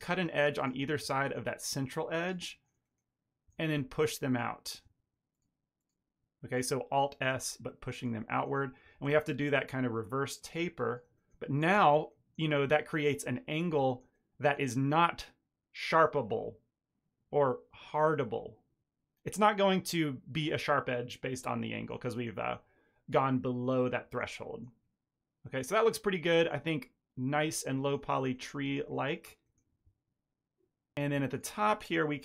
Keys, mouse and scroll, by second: 0.3 ctrl+r, 0.8 shift+middle click, 1.1 ctrl+middle click, 2.1 alt+shift+click, 2.4 middle click, 2.7 middle click, 3.0 shift+middle click, 3.4 alt+s, 5.3 shift+click, 5.7 shift+click, 6.4 shift+click, 7.2 c, 8.1 middle click, 8.9 alt+s, 11.1 middle click, 11.5 Tab, 11.7 ctrl+middle click, 12.0 middle click, 12.4 shift+middle click, 12.6 middle click, 13.2-13.7 scroll down 2, 13.8 shift+middle click, 14.1 middle click, 21.5 middle click, 22.0 ctrl+middle click, 22.3 middle click, 24.0 ctrl+middle click, 24.2 middle click, 25.3 middle click, 25.7 ctrl+middle click, 26.3 shift+middle click, 26.5 middle click, 27.4 shift+middle click, 27.7 ctrl+middle click, 28.0 middle click, 28.3 shift+middle click, 28.5 ctrl+middle click, 28.8 middle click, 29.3 middle click, 29.7 Tab, 30.3 1, 30.8 click, 31.2 ctrl+click, 32.1 g.